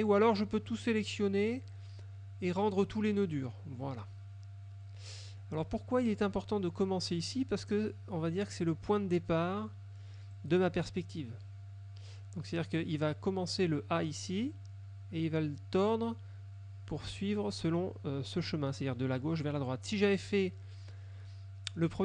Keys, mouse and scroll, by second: 0.8 click, 3.2 click, 5.4 middle click, 10.4 click.